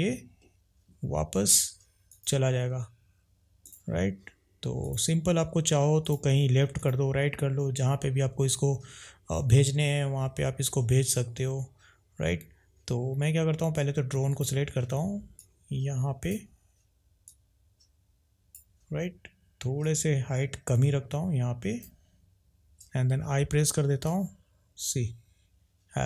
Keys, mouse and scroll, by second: 2.0 click, 4.8 click, 6.8 click, 14.3 click, 15.6 click, 17.2 click.